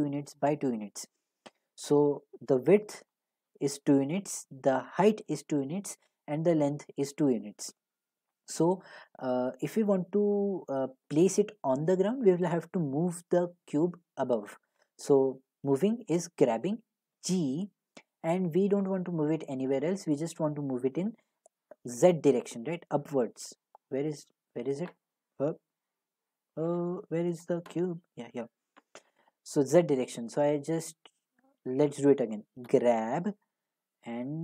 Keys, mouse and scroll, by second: 10.0-15.1 middle drag, 17.1 g, 31.4 right click, 32.7 g.